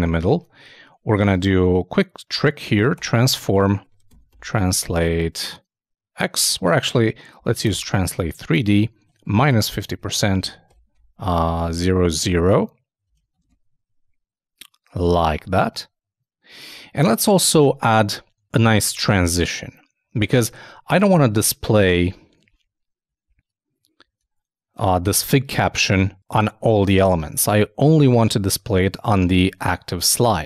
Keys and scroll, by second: 0.1 super+Tab, 1.1 super+t, 9.5 shift+0, 9.8 shift+,, 13.2 super+s, 13.4 super+Tab.